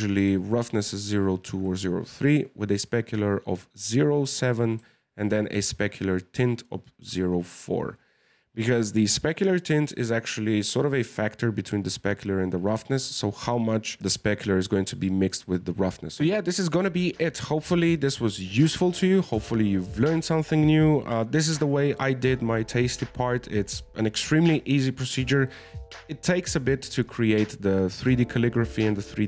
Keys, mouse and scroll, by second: 0.0-3.0 drag, 4.6-15.9 drag.